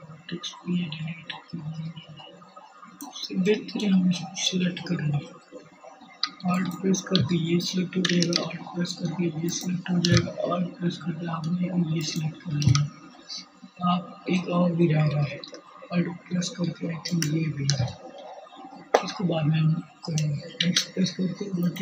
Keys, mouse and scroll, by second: 1.6-4.3 drag, 4.3 alt+middle click, 7.1 alt+shift+click, 9.6 alt+shift+click, 10.3 middle click, 19.1 x, 20.4-21.8 drag.